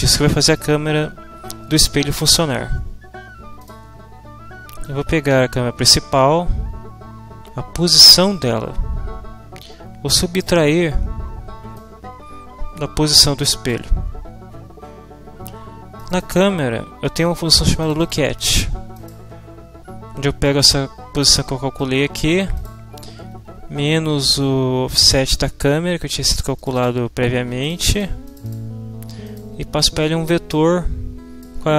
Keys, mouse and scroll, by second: 3.6 click, 4.8-10.6 drag, 11.8-13.9 drag, 16.0 middle click, 17.8 middle click, 18.9 click, 20.4 click, 21.8 click, 22.6 click, 26.6 click, 27.6 click, 28.2 click, 29.2 click, 30.5-31.6 middle drag, 31.6 click.